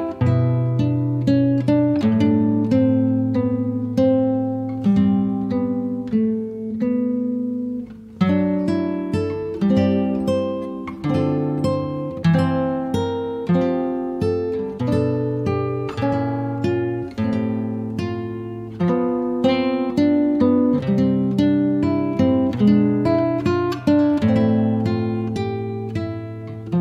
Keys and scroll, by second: 9.6 d, 26.4-26.8 typing.